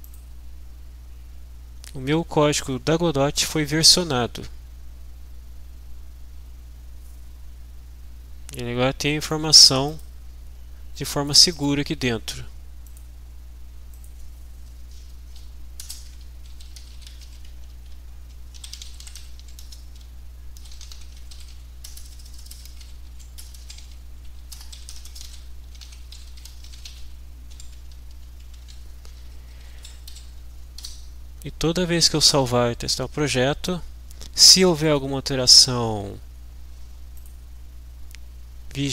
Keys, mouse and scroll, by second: 0.3 click, 9.4 click, 10.9 click, 13.1 click, 13.9 click, 15.2 Return, 16.1-28.1 typing, 29.0 Right, 29.6 Up, 30.1 Down, 30.9 F5, 34.9 click.